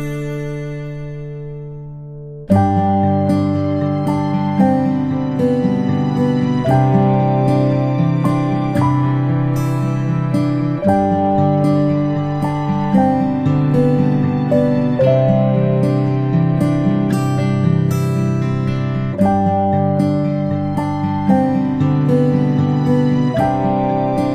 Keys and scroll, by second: 7.4-8.0 ctrl+space.